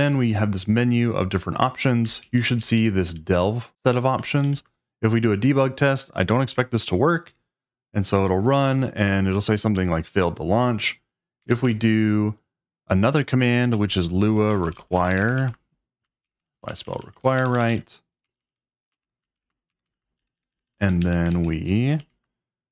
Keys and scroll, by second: 2.2 Down, 2.3 Down, 2.6 Up, 2.7 Up, 3.1 Down, 3.2 Down, 4.4 Up, 7.3 Return, 11.5 shift+;, 13.3-17.7 typing, 16.8 Left, 18.2 Left, 18.3 Left, 18.4 Left, 19.1 BackSpace, 19.4 3, 19.7 BackSpace, 19.9 e, 20.2 Right, 20.7 Right, 21.0 Right, 21.3 shift+', 21.7 shift+', 22.0 Left.